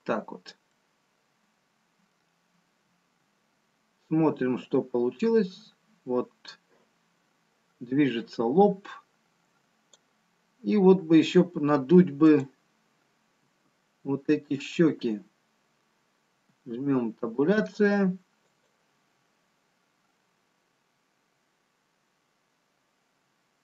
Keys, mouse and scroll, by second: 0.2 middle click, 2.3-3.0 scroll down 2, 4.2 Tab, 6.1 click, 12.7 click, 13.7 Tab, 17.9 Tab, 20.6 click, 23.1-23.6 scroll down 2.